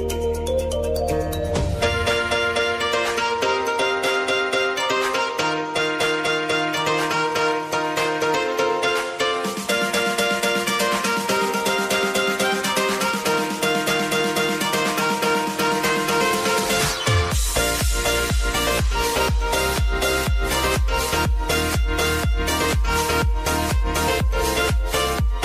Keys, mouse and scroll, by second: 1.3-15.3 drag, 17.2-17.7 typing, 18.4 click, 24.7 ctrl+d, 25.2-25.4 drag.